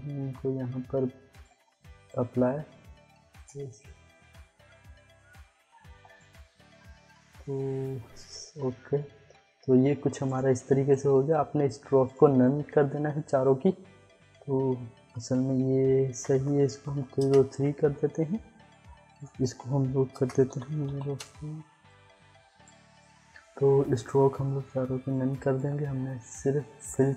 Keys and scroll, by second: 4.7 ctrl+d, 16.1 Return, 16.4-17.4 typing, 20.1 Return, 20.5 0, 20.8 4, 21.1 Return.